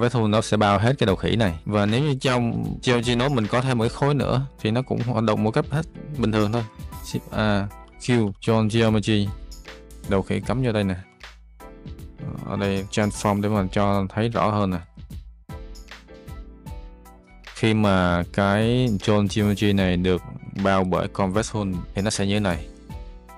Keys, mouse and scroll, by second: 1.6 click, 4.2 click, 6.8 shift+a, 9.7 click, 10.4 click, 11.0 ctrl+shift+click, 12.4 click, 12.8 click, 12.9 shift+a, 16.1 click, 17.7 click, 20.6 click, 21.8 Delete, 23.1 click.